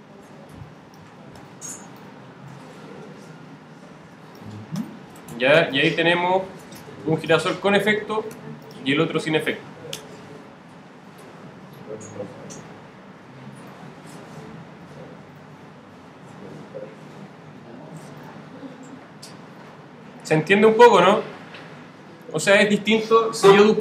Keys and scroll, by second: 8.3 z, 9.9 0, 17.9 0, 22.2 0.